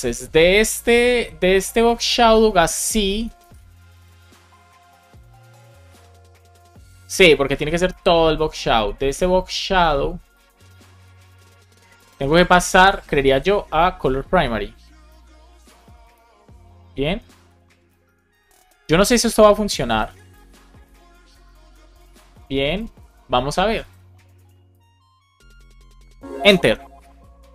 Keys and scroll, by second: 2.5 shift+super+Right, 3.3 super+c, 7.4 super+Right, 7.8 shift+super+Left, 8.3 super+c, 10.9 shift+super+Left, 11.2 super+v, 12.5 shift+super+Left, 12.8 super+v, 16.4 Return, 17.1 alt+shift+Left, 18.0 super+c, 18.3 super+Right, 18.5 Left, 19.1 alt+shift+Left, 20.0 super+v, 20.4 super+s, 21.4 super+Left, 26.4 Return.